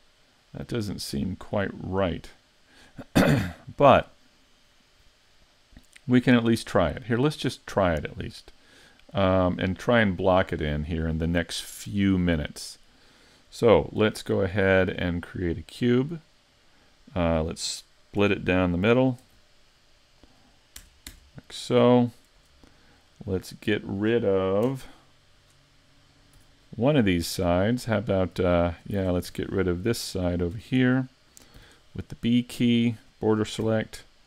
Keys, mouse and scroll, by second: 8.9-12.1 scroll down 1, 14.0 shift+a, 18.2 Tab, 19.2 ctrl+r, 23.1 middle click, 24.7 KP_Decimal, 25.5-26.3 scroll down 4, 26.5 z, 26.7-27.1 scroll down 1, 27.1 middle click, 29.0 ctrl+Tab, 29.8 middle click, 30.5 z, 30.9 middle click, 31.6 b, 33.6 x.